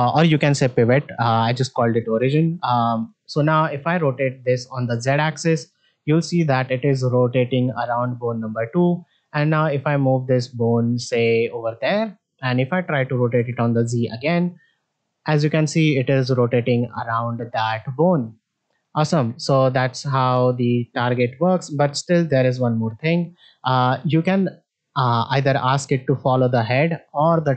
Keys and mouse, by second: 0.0 shift+middle click, 1.5 shift+middle click, 2.0 middle click, 2.8 middle click, 4.9 r, 9.2 middle click, 10.4-11.6 drag, 13.3 r, 19.1 ctrl+click, 22.6-23.0 middle drag, 25.7-27.5 drag.